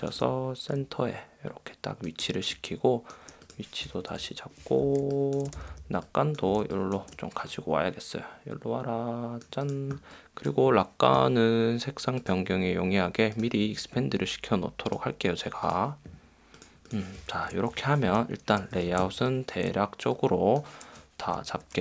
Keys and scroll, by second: 4.2 super+0, 4.4 super+-, 5.0 space, 5.7 v, 6.7 space, 18.7 super+;, 19.1 space, 21.5 shift+Down.